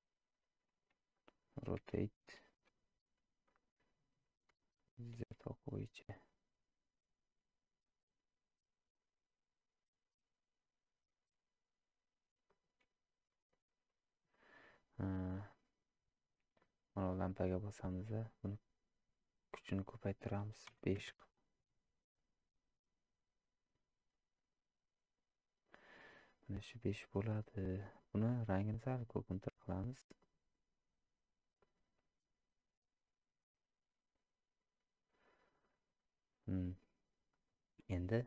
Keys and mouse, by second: 16.7 click, 19.7-25.9 drag, 27.5 click.